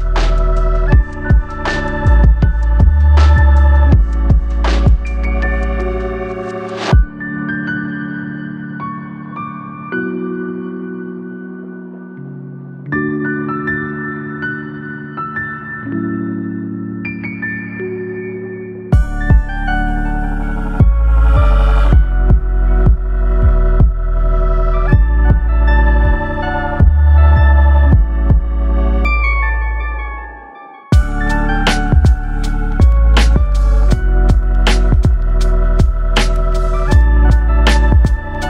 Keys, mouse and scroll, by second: 0.9 click, 3.0 click, 7.9 click, 9.4-12.9 drag, 13.8 click, 18.6-20.8 drag, 23.5-24.2 scroll down 4, 24.2-24.5 scroll up 2, 28.0 click, 38.3-38.4 middle drag.